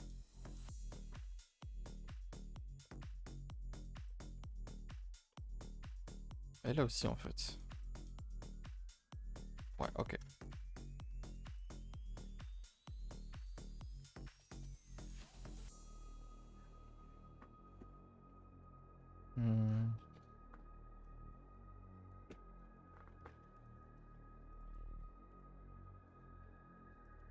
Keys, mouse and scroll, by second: 0.6 middle click, 1.2 scroll up 1, 1.3 a, 1.5 a, 1.6 middle click, 2.9-3.7 middle drag, 3.7 click, 4.1 shift+middle click, 4.5 Up, 4.7 a, 4.8 a, 5.0 middle click, 5.5 scroll up 1, 6.0 middle click, 6.3-7.0 scroll down 2, 7.0 click, 7.6 scroll down 1, 10.0-10.5 scroll up 3, 10.3 shift+middle click, 11.8 click, 23.7 click, 24.1 middle click, 24.5 shift+click.